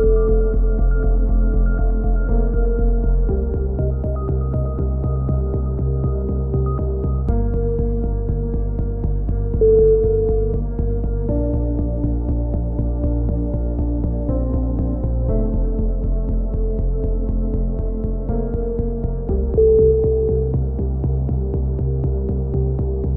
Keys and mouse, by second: 1.1 x, 1.7-3.5 right drag, 2.5-3.5 typing, 3.7-4.4 drag, 8.1 KP_1, 8.7 e, 9.1-9.6 drag, 12.2 a, 14.1-15.4 drag, 15.4 KP_1, 15.7 e, 16.2-16.8 drag, 16.8 a, 17.0-23.1 drag.